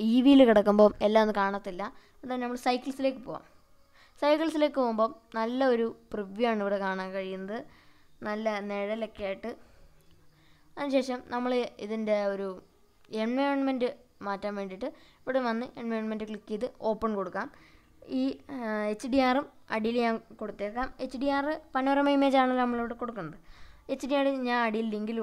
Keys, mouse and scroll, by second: 0.5 click, 1.5 click, 4.6-7.9 middle drag, 7.9 click, 15.0 click.